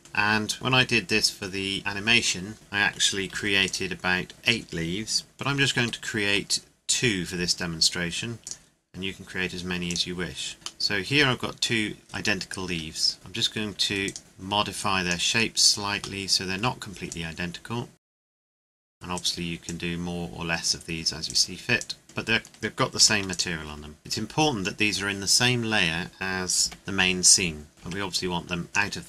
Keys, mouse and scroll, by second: 0.0 click, 2.5 click, 2.6 middle click, 3.3 ctrl+s, 3.6 click, 4.3-5.5 scroll down 1, 5.8 shift+d, 8.4 click, 10.8 middle click, 11.9-12.7 scroll up 1, 12.7 Tab, 13.1 shift+middle click, 14.0 right click, 14.2 click, 15.6 right click, 16.2 middle click, 17.1 click, 18.4 click, 18.5 alt+shift+right click, 18.6 click, 18.8 right click, 18.9 click, 19.1 right click, 19.6 click, 21.3 right click, 21.8 click, 22.0 middle click, 23.0 ctrl+s, 23.3 click, 23.7 scroll down 1, 25.5 scroll up 1, 26.6 g, 27.7 scroll up 1, 27.8 g, 28.7 click.